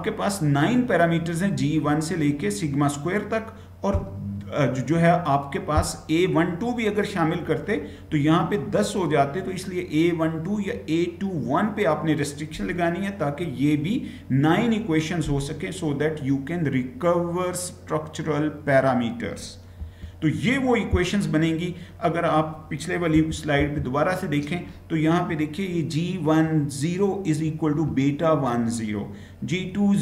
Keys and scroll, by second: 19.8 Right, 23.2 Left, 23.6 Left.